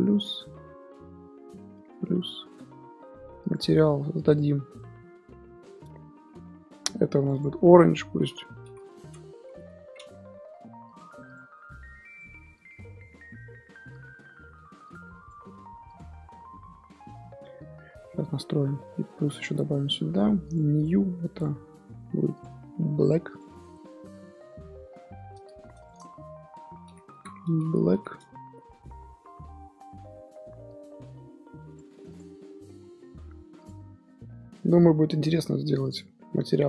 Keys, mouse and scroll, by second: 1.7 ctrl+KP_Add, 4.4 click, 4.6 scroll down 1, 4.8 middle click, 5.1-7.1 scroll up 2, 7.1 click, 7.3-10.1 drag, 10.1 ', 12.1 click, 16.4 Tab, 16.6-17.3 middle drag, 17.3 Tab, 17.5 Tab, 18.2 Tab, 19.3-19.9 drag, 19.9 Tab, 20.9-23.2 drag, 23.7 Tab, 23.8 scroll down 1, 24.1-25.8 middle drag, 25.8 click, 25.9-30.5 drag, 30.5 scroll down 2, 30.7-32.1 drag, 32.8-33.5 scroll up 3, 33.5 click, 34.9-36.5 drag.